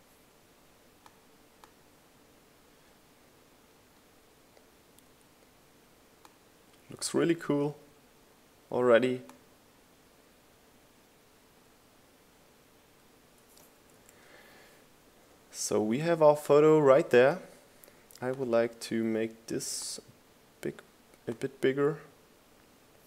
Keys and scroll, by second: 15.5 Right.